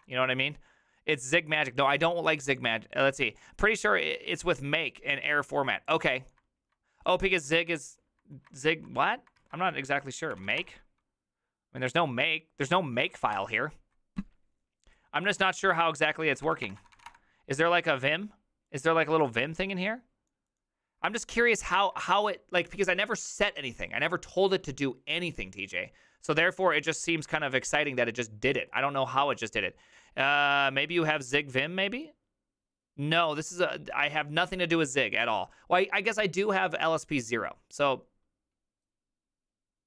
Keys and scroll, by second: 8.8 BackSpace, 9.5 alt+{, 10.1-11.0 typing, 12.9-13.6 typing, 16.4-17.5 typing, 21.8 alt++.